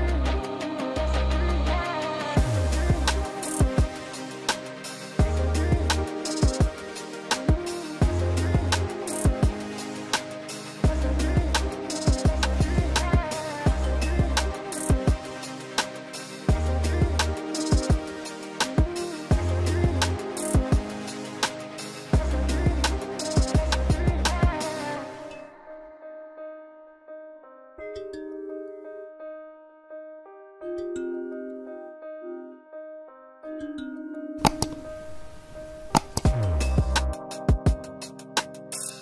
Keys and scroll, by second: 0.5 ctrl+f, 1.1 Left, 2.8 ctrl+alt+space, 7.0 alt+s, 7.3 ctrl+alt+space, 9.4 ctrl+space, 15.4 ctrl+alt+space, 20.3 ctrl+KP_2, 26.2 ctrl+alt+space.